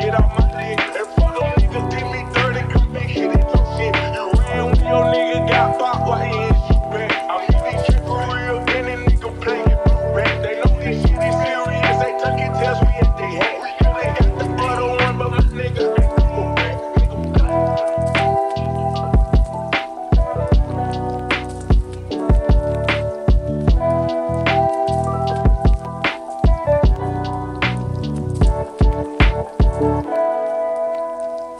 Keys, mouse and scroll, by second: 0.0 right click, 0.1 right click, 1.1 right click, 1.2 right click, 2.4 right click, 5.6 right click, 5.8 right click, 5.9 right click, 7.2 right click, 8.0 right click, 8.2 right click, 8.8 right click, 9.0 right click, 9.5 right click, 13.7 right click, 13.8 right click, 14.1 right click, 14.4 right click, 14.8 right click, 15.1 right click, 15.9 right click, 17.6 right click, 21.7 right click, 21.9 right click.